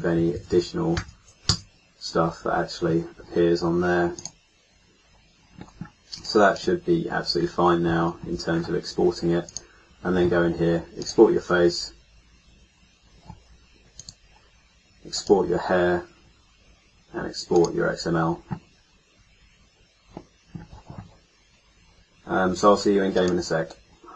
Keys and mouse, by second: 0.3 BackSpace, 0.5 BackSpace, 5.7-8.4 middle drag, 9.4-12.9 middle drag, 12.9-17.4 drag, 12.9-13.9 right drag, 17.4-24.1 middle drag.